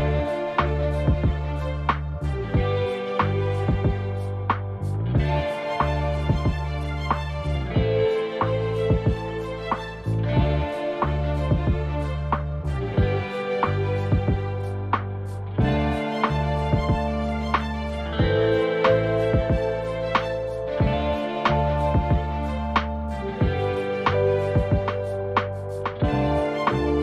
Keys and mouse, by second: 4.2 shift+d, 10.0 click, 12.4-13.2 drag, 21.0-23.8 drag, 22.4 KP_0, 25.5 KP_0.